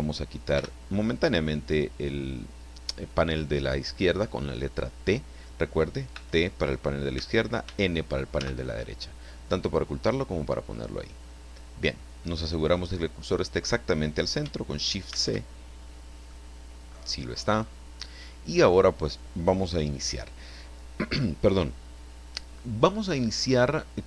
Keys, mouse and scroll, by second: 0.5 t, 6.1 t, 7.1 t, 7.6 n, 15.1 shift+c, 16.3-17.1 middle drag, 17.2 scroll up 1, 17.6 scroll down 1.